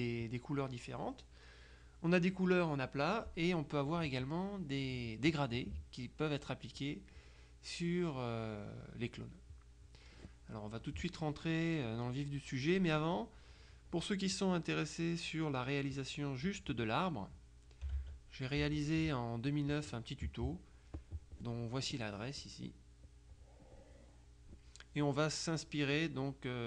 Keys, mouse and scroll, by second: 14.9 click, 18.1 alt+Tab, 19.2 Tab, 21.0 click, 23.4-25.0 drag.